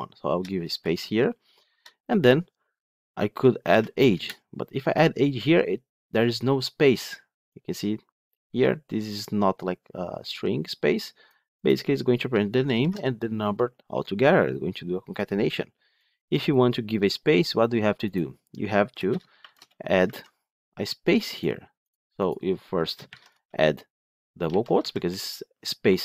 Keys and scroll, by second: 4.0 Return, 12.7 ctrl+shift+F10, 19.1 shift+Return, 20.0 ctrl+z.